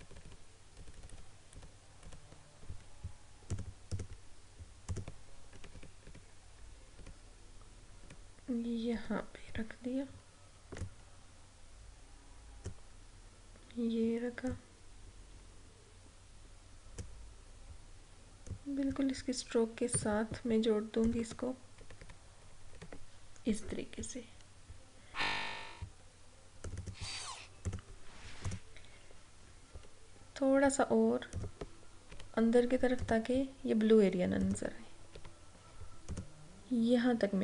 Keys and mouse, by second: 3.6 click, 5.6 Up, 9.0 Down, 10.9-20.0 drag, 20.0 a, 21.1 click, 21.9 Left, 26.8 click, 31.5 click, 32.2 Left, 33.1 click, 35.2 Left, 36.2 click.